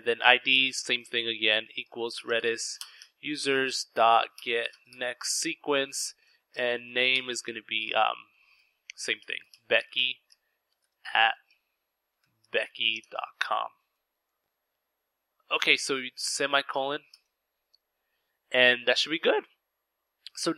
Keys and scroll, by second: 0.0-12.7 typing, 14.0-16.0 typing.